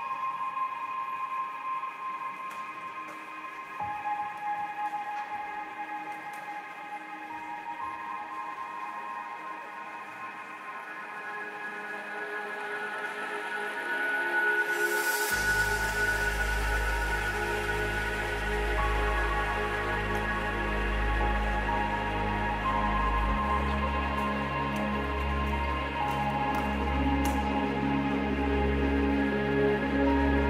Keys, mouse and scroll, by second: 0.0 middle click, 0.3 click, 2.5 middle click, 7.7 g, 12.6 g, 14.0 right click, 14.2 g, 15.0 g, 15.6 g, 16.7 g, 17.3 g, 17.6 g, 18.8 middle click, 19.0-20.6 drag, 21.6 click, 22.2 click, 23.1 click, 23.4 click, 24.3 middle click, 24.6 middle click, 25.1 middle click, 25.4 middle click, 25.6 click, 26.8 click, 27.7 click, 28.2 middle click, 28.8 middle click.